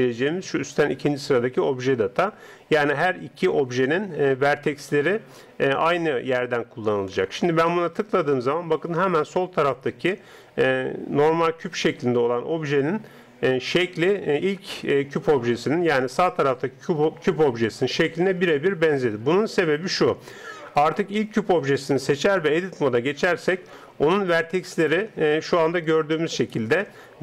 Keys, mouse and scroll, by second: 20.8 right click, 22.4 Tab, 23.1-25.5 middle drag, 25.5-27.2 right drag.